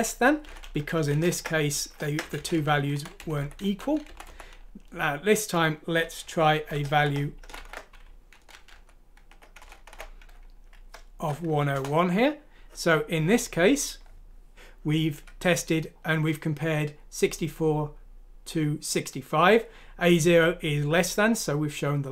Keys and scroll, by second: 0.4 Down, 0.6 Down, 0.7-2.2 typing, 3.2 Delete, 3.3-5.2 typing, 6.2-10.1 typing, 11.6 F6, 11.7 Return.